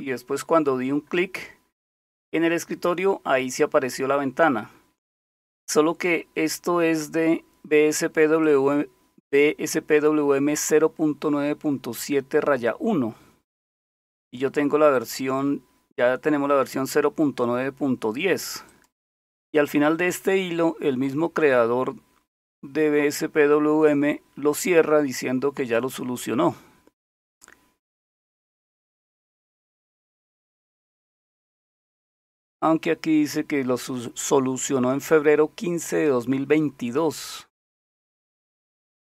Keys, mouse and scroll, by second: 5.7-6.6 scroll down 2, 8.4-10.6 drag, 12.6-14.3 scroll down 2, 15.0 click, 18.7 click, 19.6-21.0 scroll down 3, 21.4 scroll down 2, 21.9-23.4 scroll down 3, 23.9 scroll down 2, 24.5-25.3 scroll down 2, 25.3-27.8 scroll down 4, 27.8-28.2 scroll up 1, 37.5 scroll up 2.